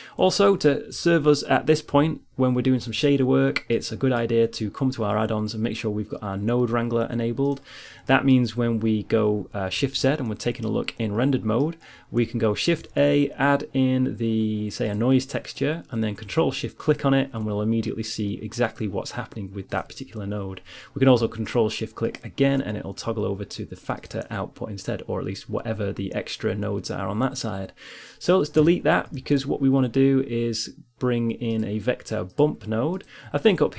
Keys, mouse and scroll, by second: 1.7 ctrl+alt+u, 8.4-10.3 middle drag, 10.3 shift+z, 12.4 shift+a, 17.2-20.9 drag, 21.6-23.6 drag, 23.8-25.7 drag, 29.1 x, 29.7 shift+a.